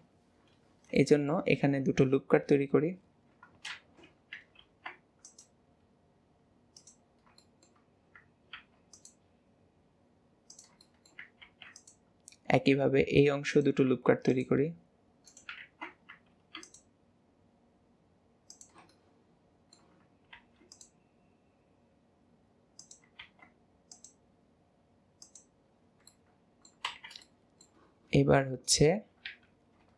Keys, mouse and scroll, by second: 1.0-2.5 shift+middle drag, 2.5 KP_7, 3.7 alt+z, 4.6 ctrl+r, 7.2 scroll up 1, 7.5 shift+middle click, 10.9 shift+middle click, 11.5 ctrl+r, 14.1 ctrl+r, 15.7 ctrl+z, 19.1-20.4 middle drag, 20.4 ctrl+r, 23.2 ctrl+r, 25.7 scroll down 2, 26.1 middle click, 26.9 alt+z, 27.3-29.3 shift+middle drag, 29.3 KP_7.